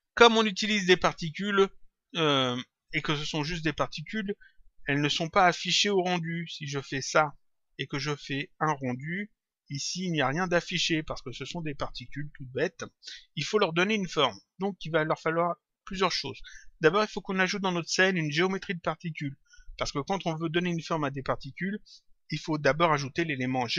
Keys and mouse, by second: 6.8 click, 8.3 click, 9.4 click, 10.9 click, 17.7 click.